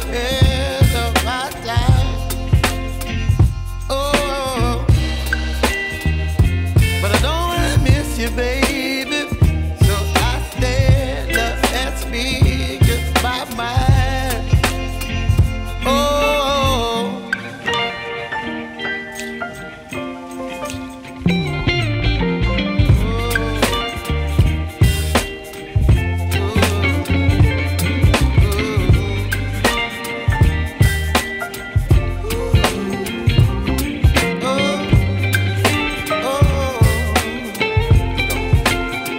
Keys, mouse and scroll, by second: 9.7 v, 13.8 v, 17.6 v, 22.3 v, 37.6 v.